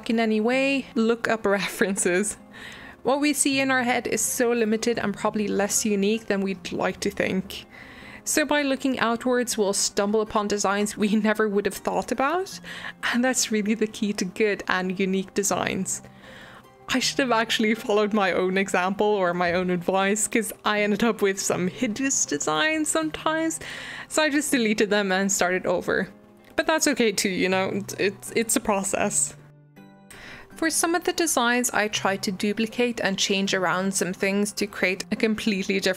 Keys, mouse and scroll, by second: 0.1 middle click, 0.5 Tab, 0.6 middle click, 0.8 Tab, 1.0 alt+z, 1.3 middle click, 1.4 click, 1.7 alt+z, 1.9 g, 2.7 scroll up 1, 3.3 ctrl+click, 3.3 middle click, 3.6 ctrl+click, 3.7 middle click, 4.2 ctrl+click, 4.3 g, 5.3 ctrl+z, 5.4 g, 5.7 Tab, 5.7-6.7 middle drag, 6.7 Tab, 7.4 click, 9.7 click, 10.7 middle click, 11.1 alt+z, 11.4 middle click, 11.5 click, 12.0 click, 13.0 middle click, 13.5 alt+z, 13.7 alt+e, 14.8 middle click, 14.8 scroll up 2, 15.0-15.4 middle drag, 15.4 click, 15.6 scroll up 1, 15.8 click, 16.0 middle click, 16.6 middle click, 17.1 ctrl+b, 18.1 middle click, 18.4 ctrl+z, 18.5 middle click, 19.1 shift+click, 19.2 middle click, 19.6 ctrl+click, 19.7 middle click, 20.6 shift+click, 20.7 middle click, 21.3 scroll down 2, 21.5 middle click, 21.7 alt+z, 22.2 click, 23.4 Delete, 24.5 scroll up 1, 24.6-25.1 middle drag, 25.1 click, 25.4 alt+z, 25.6 click, 26.2-28.2 middle drag, 28.3 middle click, 28.6 Tab, 28.9 Delete, 29.1 scroll down 1, 29.4 middle click, 29.6-29.9 scroll up 2, 29.9 scroll down 1, 30.1 shift+middle click, 30.3 o, 30.4 middle click, 30.5-30.8 scroll up 2, 30.8 click, 30.9 scroll down 1, 31.0 middle click, 31.2 shift+d, 32.3-33.3 drag, 33.3 middle click, 33.7 scroll up 1, 33.8 shift+middle click, 34.2 Tab, 34.6 shift+middle click, 35.1 alt+z, 35.3 click.